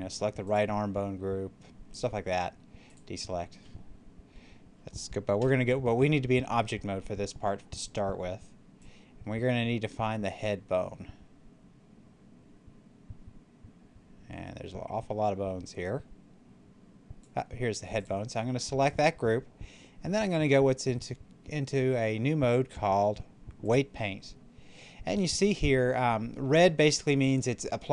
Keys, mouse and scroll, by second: 2.7 click, 5.3 Tab, 8.7-17.9 drag, 9.0 typing, 23.6 click.